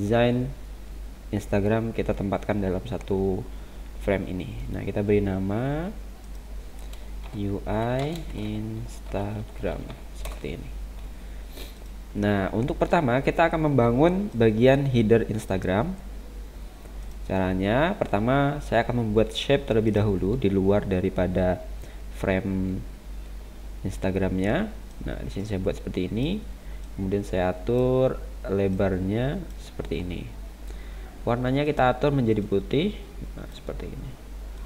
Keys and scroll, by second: 8.0 space, 13.9 space.